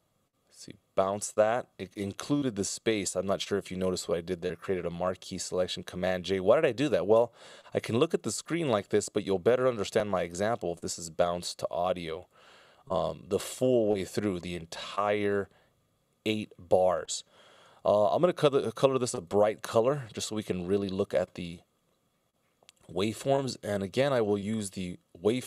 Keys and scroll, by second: 7.3 super+z, 8.0 super+z, 8.5 z, 10.2 shift+super+z, 17.5 alt+c, 24.8 ctrl+alt+super+m.